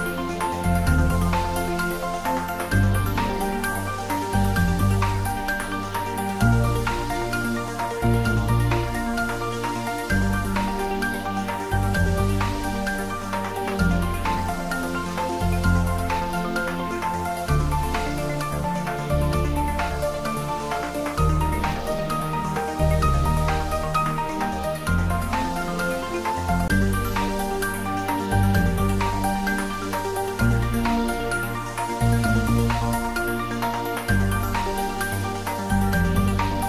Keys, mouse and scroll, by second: 2.5 shift+click, 13.7 ctrl+z, 15.4 alt+shift+click, 18.3 shift+scroll down 1, 19.9-21.2 scroll down 1, 25.2 click, 28.0 click, 34.4-36.3 scroll up 1.